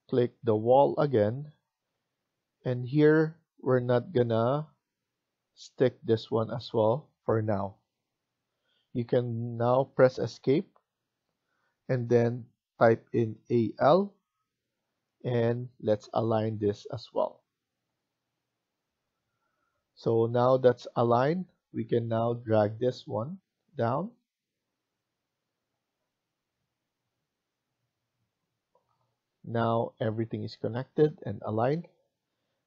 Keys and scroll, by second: 9.8 Escape, 10.2 Escape, 13.2-13.8 typing, 15.9-16.8 typing, 18.6-19.3 typing, 20.8 Escape, 21.2 Escape.